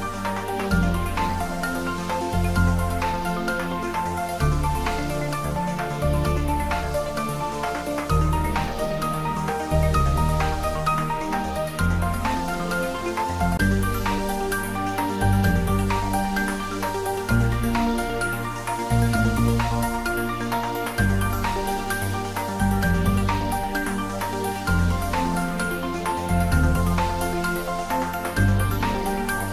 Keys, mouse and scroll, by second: 3.2 Tab, 6.4 click, 7.1 ctrl+z, 7.9-8.2 scroll down 1, 8.2-9.9 middle drag, 9.9 ctrl+r, 11.1 Tab, 12.1 ctrl+e, 12.4 ctrl+r, 20.2 click, 21.0 ctrl+x, 22.8 click, 24.4 shift+click, 25.1 shift+middle click, 25.9 scroll down 1, 26.3-27.8 middle drag, 27.8 shift+click, 28.2 shift+scroll down 1, 29.3 middle click.